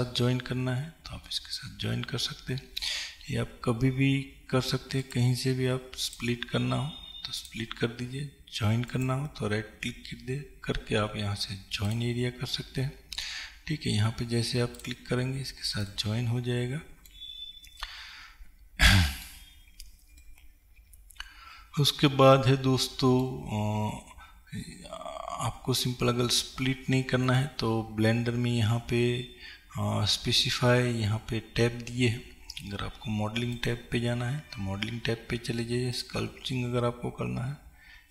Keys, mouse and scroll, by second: 0.0-1.4 right drag, 1.4-6.3 middle drag, 6.3-11.9 right drag, 13.3 right click, 14.9-16.0 right drag, 16.0-33.7 middle drag, 33.7-38.1 drag.